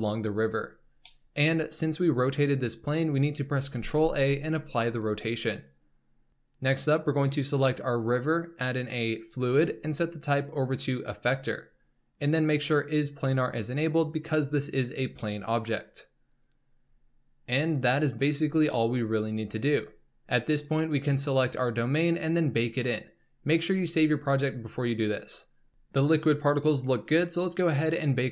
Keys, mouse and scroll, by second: 3.7 ctrl+a, 7.1 click, 9.1-13.2 drag, 15.2-20.5 middle drag, 20.5 click, 25.5-25.9 scroll down 5, 25.9 scroll up 4, 26.6-28.3 drag.